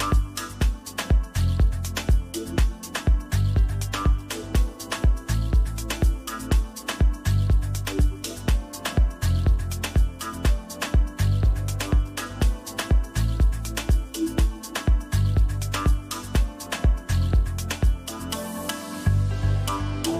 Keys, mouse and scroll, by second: 3.9 click, 11.4 click, 15.4 click, 18.1 click.